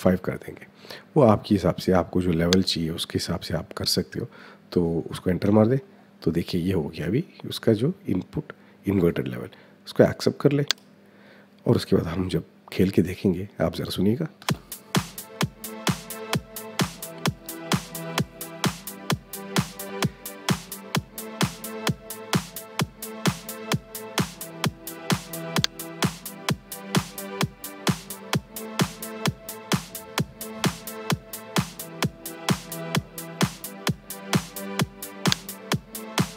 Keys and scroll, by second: 5.2 Return, 14.2 space.